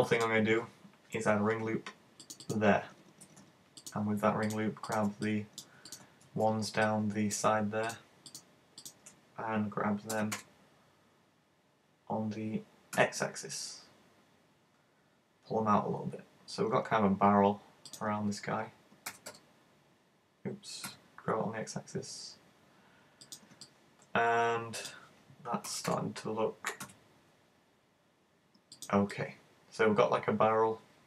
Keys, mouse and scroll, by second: 1.2 ctrl+r, 2.6 click, 3.9 right click, 4.4 shift+right click, 4.9 shift+right click, 6.3 super+z, 6.8 middle click, 7.9 shift+right click, 8.3 shift+right click, 8.9 shift+right click, 19.2 g, 23.4 click, 23.6 middle click, 25.7 g, 28.9 click, 29.2 middle click.